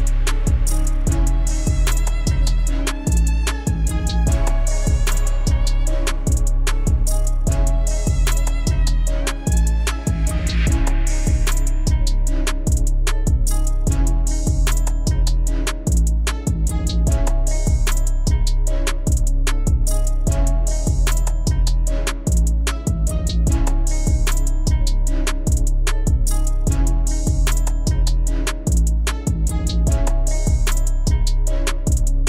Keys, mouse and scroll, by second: 0.1 Delete, 0.4 click, 1.3 Tab, 1.6 click, 2.3 s, 4.1 click, 4.8 g, 6.1 Tab, 6.6 shift+z, 6.8 click, 7.1-8.4 middle drag, 8.4 KP_7, 8.9 scroll down 1, 9.0-9.7 middle drag, 9.7 KP_7, 10.4 shift+z, 10.9 click, 12.2 g, 13.5 KP_3, 14.2 Tab, 14.4 click, 15.0 s, 16.0 KP_7, 16.5 shift+z, 16.8-18.3 middle drag, 18.5 KP_1, 18.8 KP_3, 19.3 KP_7, 20.1 click, 20.5-21.9 middle drag, 22.7 click, 23.3 KP_7, 26.0 middle click, 26.7 Tab, 26.9 click, 27.2-28.1 middle drag, 28.1 KP_3, 28.7 scroll up 3, 28.9-29.9 shift+middle drag, 29.9 a, 30.2 a, 31.1 Tab, 31.6 click.